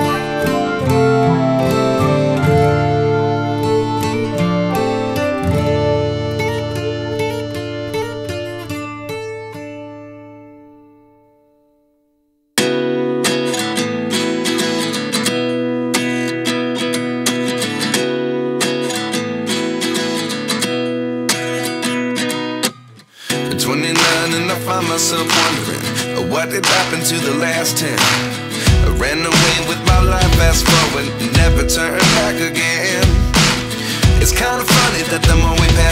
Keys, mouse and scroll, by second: 0.4 g, 3.1 scroll up 6, 3.5 shift+d, 4.0 KP_1, 4.6 g, 6.8 click, 7.4 KP_0, 7.9 ctrl+s, 8.2-8.5 scroll down 2, 8.5 click, 9.6 shift+d, 10.0 g, 13.2 KP_1, 13.8 shift+middle drag, 14.0-14.6 scroll up 5, 14.6 g, 16.0 ctrl+s, 16.0 click, 16.2-17.3 scroll down 1, 17.5 g, 19.5 g, 20.3 click, 21.2 g, 22.5 KP_0, 22.8 scroll down 5, 23.1 ctrl+s, 23.2 click, 24.9 scroll up 1, 25.1 ctrl+s, 25.4 shift+middle drag, 25.6 click, 26.1 click, 27.1 click, 27.6 ctrl+s, 28.0 click, 28.5 g, 29.4 click, 29.9 g, 30.6 scroll down 8, 30.9 ctrl+s, 31.0-32.3 scroll up 8, 31.6 middle drag, 32.3 click, 34.1-35.6 right drag.